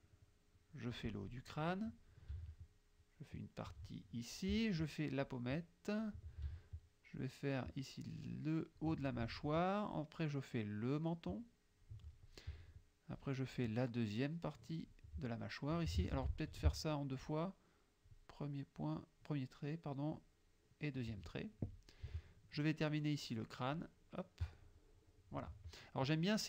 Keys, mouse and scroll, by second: 1.5 click, 3.1 shift+click, 5.3-6.3 shift+drag, 7.3-9.0 shift+drag, 9.9-12.1 shift+drag, 13.2-15.1 shift+drag, 16.2 ctrl+z, 17.3-18.3 shift+drag, 20.2-21.2 shift+drag, 23.8-25.6 shift+drag.